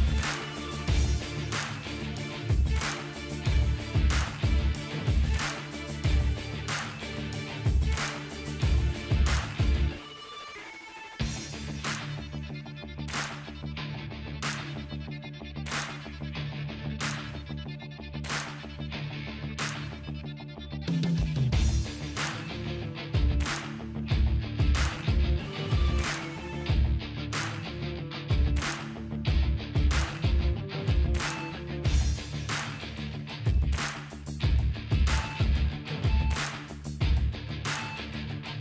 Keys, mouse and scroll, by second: 0.4 click, 0.4 typing, 1.2 click, 3.9 ctrl+j, 3.9 typing, 6.7 typing, 8.5 click, 10.8-15.8 drag, 22.0 click, 24.3-26.4 drag, 32.5 click, 32.5 click, 32.5 typing, 33.6 right click, 38.4 click.